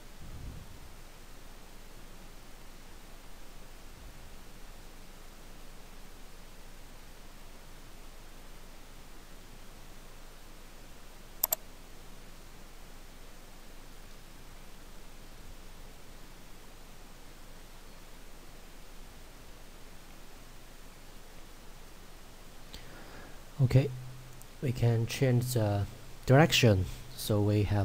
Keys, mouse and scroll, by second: 3.6 middle click, 11.5 click, 20.5 middle click, 22.5-23.4 scroll down 1, 23.4 middle click.